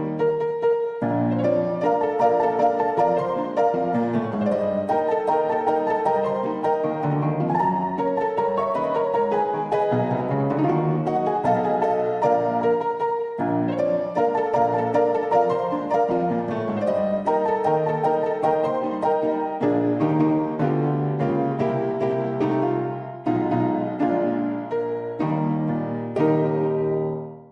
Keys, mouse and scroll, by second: 0.0 n, 0.3-0.7 drag, 0.7 Tab, 1.1 middle click, 1.9 click, 2.2 Tab, 2.5 shift+click, 2.8 click, 3.5-5.1 drag, 6.0-9.4 drag, 9.7-11.0 drag, 12.3 ctrl+2, 13.3 click, 13.9-14.4 drag, 15.0-17.0 drag, 17.5-19.2 drag, 20.2-20.8 drag, 21.0-21.8 drag, 22.2 shift+click, 23.0 ctrl+s, 23.3 click, 24.8-27.5 middle drag.